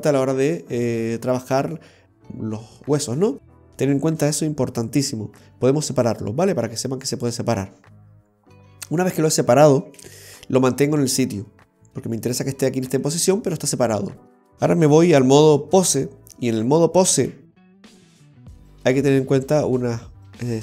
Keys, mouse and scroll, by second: 10.1 ctrl+z.